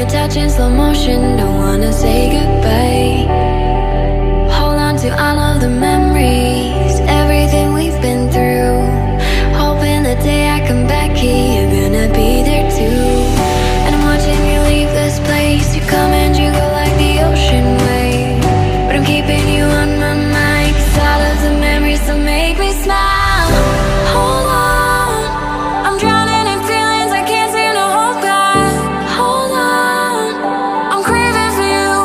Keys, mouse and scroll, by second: 6.4 ctrl+click, 6.9 ctrl+click, 7.2 ctrl+click, 8.0 scroll down 1, 9.6-12.2 scroll up 1, 12.4 ctrl+click, 14.1 right click, 15.8 right click, 25.7 ctrl+click, 26.0 ctrl+click, 26.4 ctrl+click, 26.9 ctrl+click.